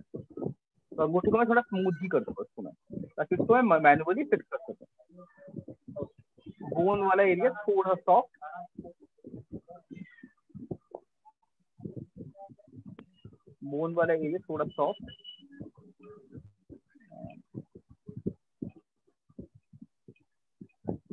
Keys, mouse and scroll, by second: 0.7 click, 1.6 click, 2.5 alt+click, 6.4 click, 7.5 click, 8.5 alt+click, 9.4 click, 11.4 click, 12.5 alt+click, 14.4 click, 15.4 click, 16.4 click, 17.5 alt+click, 18.4 alt+click, 19.5 click, 20.4 click.